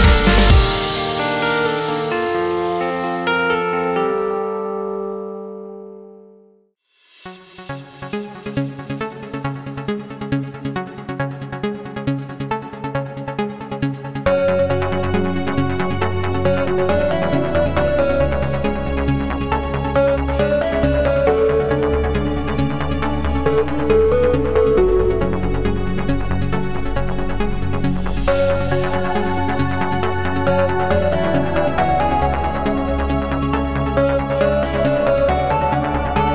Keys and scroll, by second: 2.7 w, 8.4 q, 35.9 super+e.